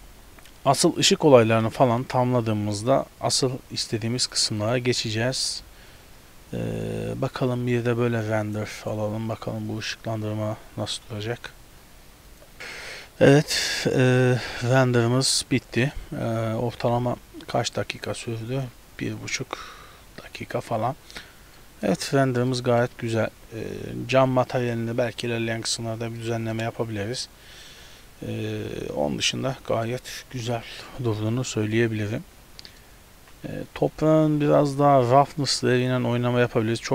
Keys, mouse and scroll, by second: 0.8 a, 1.0 a, 1.7 ctrl+b, 4.3 click, 6.5-8.5 scroll up 5, 8.5 click.